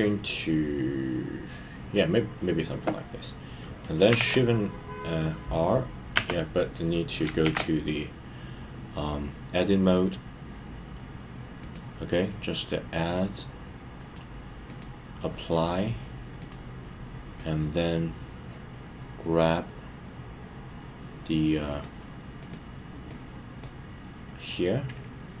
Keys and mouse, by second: 14.0 right click, 14.6 click, 16.4 click, 17.5 click, 21.7 click, 23.2 click.